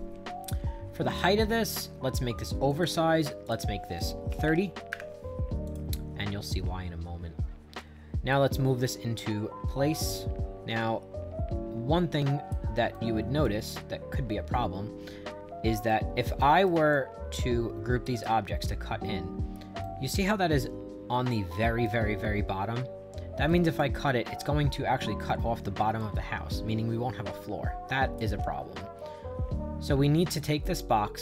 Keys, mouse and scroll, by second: 1.1 click, 1.6 click, 2.7 click, 3.5 click, 4.1-5.0 typing, 5.7 click, 7.8-12.5 drag, 12.9 right click, 13.7 middle click, 14.8-15.9 middle drag, 15.9 right click, 16.9-18.0 drag, 18.2 click, 19.8-21.8 right drag, 23.5 right click, 26.0-28.2 drag, 28.6 middle click, 28.7-30.4 middle drag, 30.4 click.